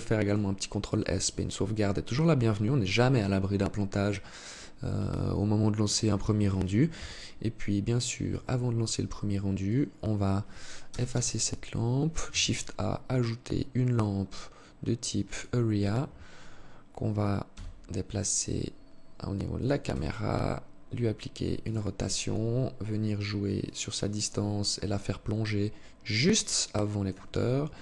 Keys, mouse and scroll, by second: 4.2 alt+click, 6.0 KP_3, 6.8-7.2 scroll down 3, 7.8 scroll down 1, 8.8 right click, 10.0 Delete, 11.4 shift+a, 16.6 g, 19.0 r, 21.4-22.8 scroll down 9, 22.8 click, 27.0 click.